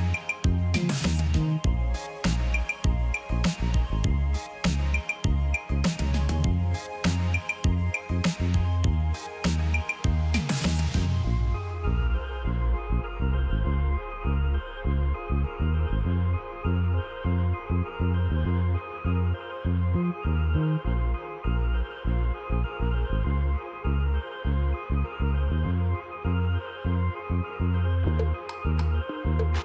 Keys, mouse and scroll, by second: 1.1 ctrl+click, 10.6 double click.